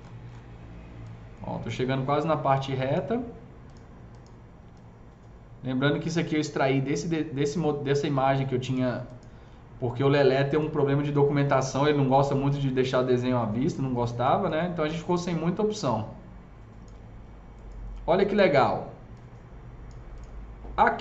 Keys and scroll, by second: 12.2 shift+s.